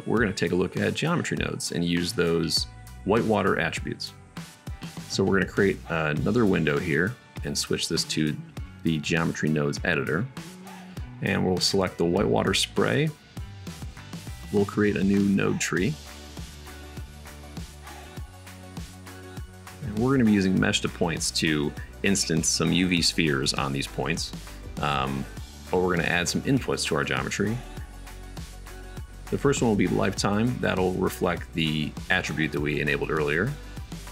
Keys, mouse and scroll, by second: 4.7-6.6 drag, 4.7 n, 13.0 shift+middle click, 14.8 click, 15.6-19.1 middle drag, 20.5 shift+a, 31.0 middle click, 31.9-34.1 middle drag.